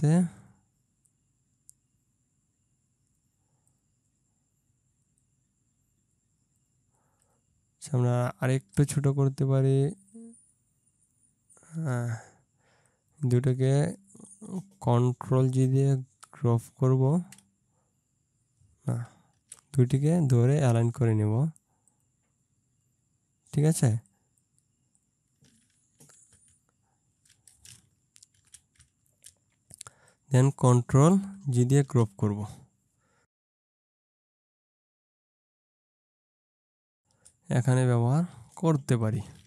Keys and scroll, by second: 17.1 ctrl+g, 19.5 ctrl+z, 26.5 Left, 28.4 ctrl+z, 29.1 ctrl+Down, 31.9 ctrl+g.